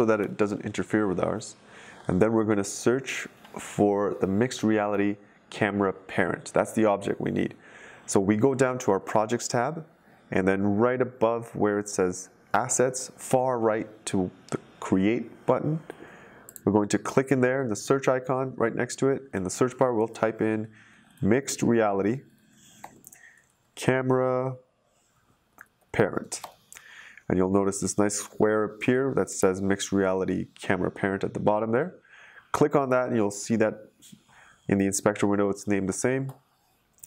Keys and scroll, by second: 0.2 Delete, 20.6-26.8 typing.